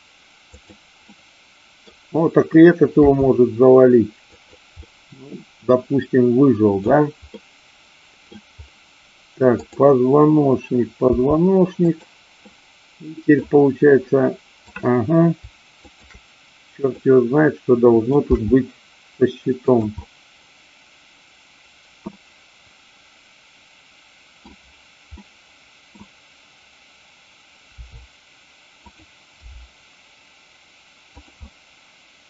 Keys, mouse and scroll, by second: 0.6 click, 1.0-1.9 middle drag, 3.0 r, 4.3 click, 4.8-6.8 middle drag, 7.3-8.3 middle drag, 9.7-10.6 drag, 11.0 r, 11.9 click, 12.4-13.3 middle drag, 14.6 click, 15.9-16.9 shift+drag, 16.9-18.0 middle drag, 18.3 g, 19.7 click, 20.0-21.8 middle drag, 22.0-24.3 middle drag, 25.2-25.9 middle drag, 27.7 r, 28.8 click, 29.4 g, 31.0 click, 31.4-32.2 middle drag.